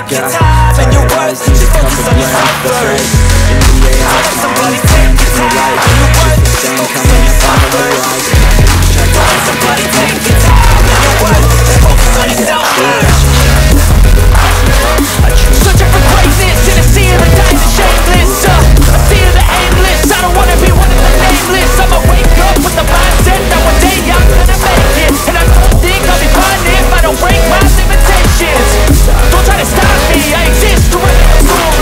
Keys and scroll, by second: 6.9 F3, 9.3 shift+F2, 9.7 F3, 13.1 F3, 22.6 F3, 23.6 F2, 28.2 F4, 28.6 Escape, 31.0 shift+F2.